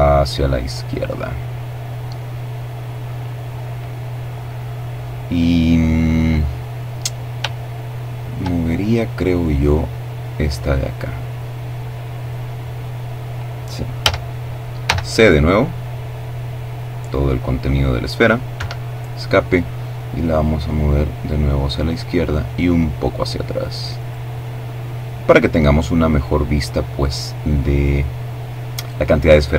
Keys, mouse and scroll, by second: 6.2-7.4 shift+middle drag, 8.7-12.2 middle drag, 12.6 a, 13.5 c, 13.9-16.8 drag, 17.1 Escape, 19.0-20.9 drag, 21.0-23.2 drag, 28.6 a, 29.4 c.